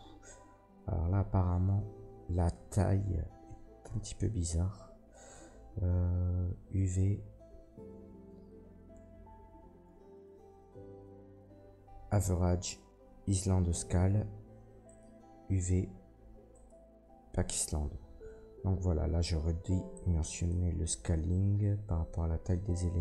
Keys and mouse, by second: 2.5-23.0 drag, 2.5 a.